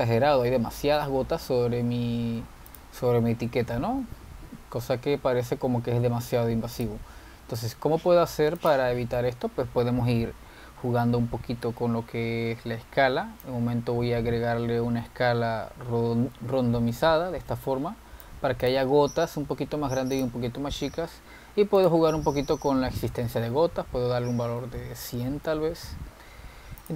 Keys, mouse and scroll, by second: 0.1 click, 0.7-1.4 scroll up 6, 1.7-2.4 scroll down 6, 3.5 z, 8.0 click, 9.4 z, 11.9-14.6 scroll down 9, 14.6-17.7 drag, 19.9 click, 20.3-21.2 scroll up 2, 21.2 drag, 22.2-22.9 scroll up 4, 22.9-24.0 drag, 24.0 0, 25.7-26.9 middle drag.